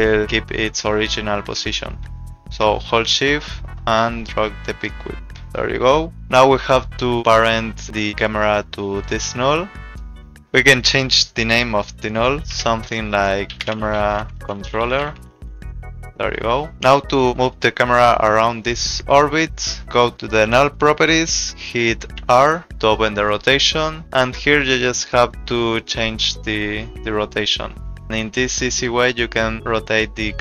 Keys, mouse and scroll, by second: 1.7 ctrl+z, 2.2 ctrl+z, 3.1 shift+click, 5.1 shift+click, 8.0 click, 9.0 click, 12.6-15.9 typing, 19.6 click, 22.2 r, 26.0 click.